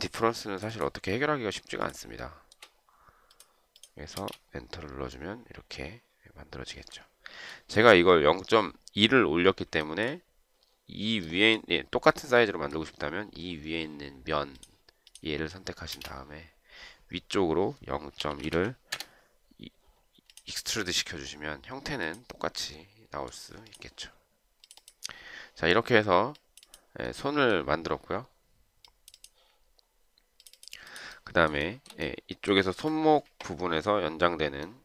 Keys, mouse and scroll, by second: 2.6 shift+right click, 4.4 space, 10.2 shift+right click, 16.1 space, 18.3-19.2 typing, 31.9 shift+right click.